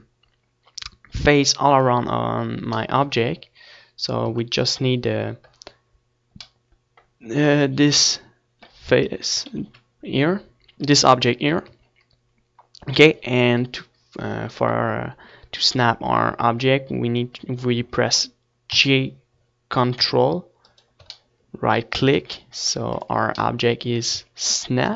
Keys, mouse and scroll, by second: 4.9 Tab, 7.5 Tab, 9.8 KP_1, 10.3 KP_3, 12.4 Tab, 13.3-14.3 middle drag, 19.7 g, 21.9 click, 22.3 middle click, 23.2 Tab, 24.0 ctrl+s.